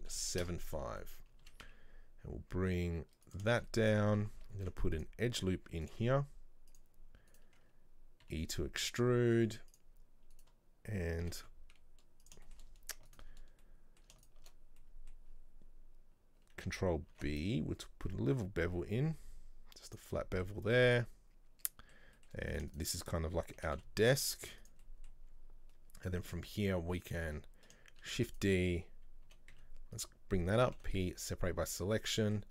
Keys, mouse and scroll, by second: 1.1 middle click, 1.5 s, 3.6 shift+middle click, 4.1-4.7 scroll up 1, 4.7 ctrl+r, 6.8 click, 7.4 right click, 8.4 e, 9.8 click, 10.4 right click, 11.3 g, 12.6 shift+middle click, 13.2 alt+right click, 13.7 middle click, 14.3 alt+shift+right click, 14.9-17.2 middle drag, 17.2 ctrl+b, 20.3-22.6 middle drag, 22.6 right click, 22.8 shift+right click, 23.7 g, 24.9 middle click, 25.4-25.8 scroll up 1, 26.6 click, 27.0 right click, 28.1 shift+d, 29.4 g, 32.0 Tab, 32.2 middle click.